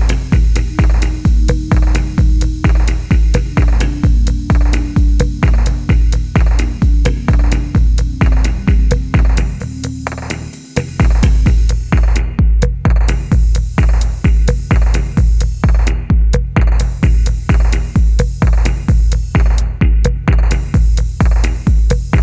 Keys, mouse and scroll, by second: 0.8 shift+middle click, 1.7 shift+middle click, 10.3 e, 13.3 r, 15.2 middle click, 17.1-17.9 scroll up 1, 17.9 middle click.